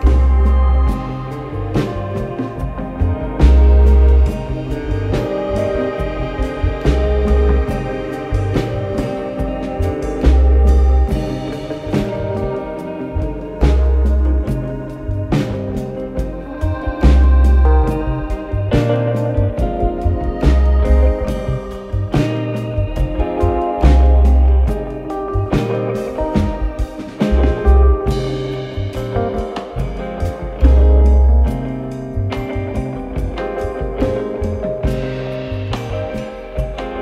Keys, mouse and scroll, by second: 0.3 alt+middle click, 0.8 click, 2.2 alt+middle click, 2.7 right click, 4.0 click, 5.3 click, 6.7 click, 7.8 click, 8.8 s, 10.0 click, 11.2 click, 11.4 click, 11.7-13.7 typing, 15.6 right click, 16.9 click, 18.0-19.6 typing, 18.6 click, 21.1 click, 24.0 click, 30.0 click, 31.4 click, 32.1-32.8 typing, 34.2 click.